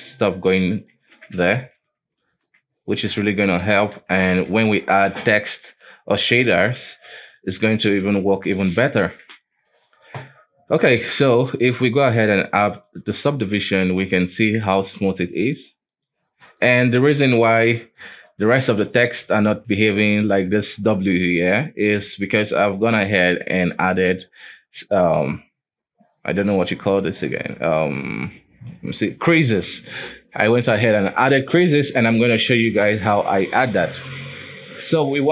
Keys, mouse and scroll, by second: 1.3 ctrl+z, 1.6 shift+middle click, 2.3 ctrl+r, 3.8 ctrl+z, 4.2 shift+middle click, 4.8-5.5 scroll down 1, 5.5 shift+middle click, 5.9-6.9 scroll up 1, 6.9 ctrl+r, 8.2 ctrl+z, 8.8 Tab, 9.2-9.5 scroll down 1, 9.5-11.9 shift+middle drag, 11.9-13.7 drag, 13.7-14.1 scroll down 1, 14.1 KP_7, 14.7-15.6 scroll up 2, 15.6 click, 16.0 click, 16.7 click, 17.1 click, 17.9 click, 18.2 click, 19.2-19.6 scroll up 3, 19.6-20.7 shift+middle drag, 20.7-22.7 scroll down 4, 22.7 click, 23.0 click, 23.5 Tab, 23.8 scroll up 2, 24.1 alt+a, 24.4-27.5 scroll down 2, 27.8 right click, 29.0 n, 29.8 n, 33.1-33.7 scroll up 2, 33.7 shift+middle click, 34.6 Tab, 34.8-35.3 scroll down 4.